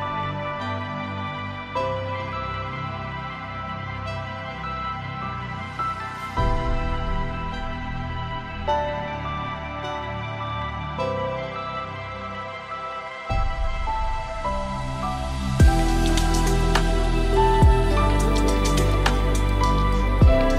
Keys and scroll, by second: 4.8 ctrl+space.